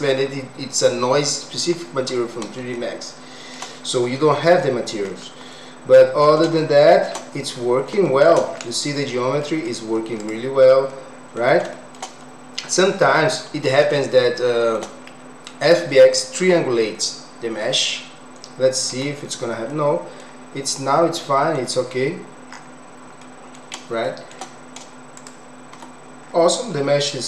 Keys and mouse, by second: 2.7 shift+middle click, 5.5 middle click, 6.6 shift+middle click, 8.0 shift+middle click, 9.0 middle click, 10.2 click, 10.9 middle click, 11.7 shift+middle click, 13.9 shift+middle click, 19.0 Tab, 19.7 middle click, 21.2 middle click, 22.1 Tab, 23.3 middle click, 24.0 shift+middle click, 25.2 click, 25.8 Tab.